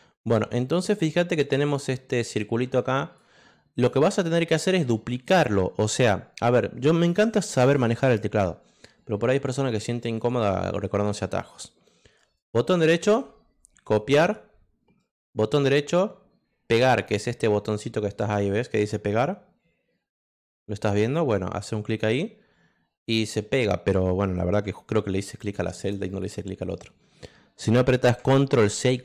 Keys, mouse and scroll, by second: 0.2 click, 0.7 click, 1.3 click, 2.3 click, 3.7 click, 4.3 click, 14.1 click, 14.9 right click, 21.9 click, 23.0 click, 24.9 ctrl+z, 25.4 click, 26.0 click, 28.7 ctrl+c.